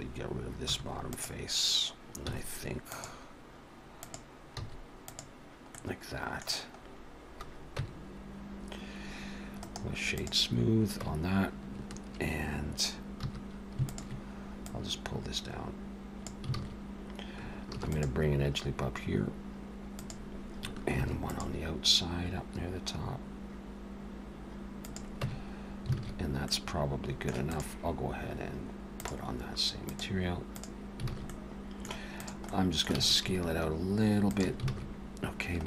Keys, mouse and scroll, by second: 0.7 3, 1.1 click, 2.2 x, 4.0 click, 4.5 x, 5.7 middle click, 6.9 scroll up 1, 7.7 Tab, 9.6 right click, 11.0 Tab, 13.2 2, 13.9 alt+shift+click, 14.6 click, 16.6 alt+a, 17.9 ctrl+r, 21.0 ctrl+r, 25.2 Tab, 26.0 alt+a, 26.5 middle click, 27.4 click, 29.5 click, 29.9 click, 31.1 alt+a, 31.3 middle click, 32.2 click, 32.5 middle click, 32.9 s, 34.7 alt+a.